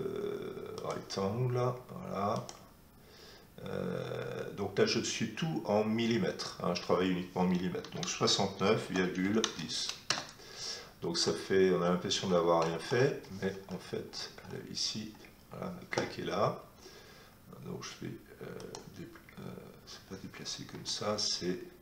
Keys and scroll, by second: 7.8 6, 8.8 ,, 9.2 1, 9.4 0, 10.0 Return, 20.7 Escape.